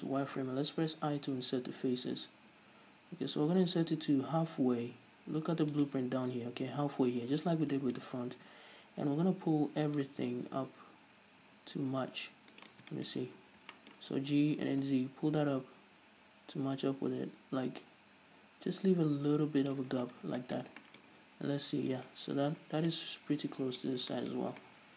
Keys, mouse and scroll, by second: 6.2 shift+click, 8.1-10.3 shift+middle drag, 8.5-9.1 scroll up 2, 9.1-10.3 scroll up 1, 10.3-13.0 drag, 13.3-16.5 shift+middle drag, 13.4-14.1 scroll up 2, 14.9 g, 20.0 shift+click, 20.2 scroll down 1, 20.8-21.3 shift+middle drag, 21.3-22.2 scroll up 1, 22.4-23.0 scroll down 1, 23.2-24.5 middle drag.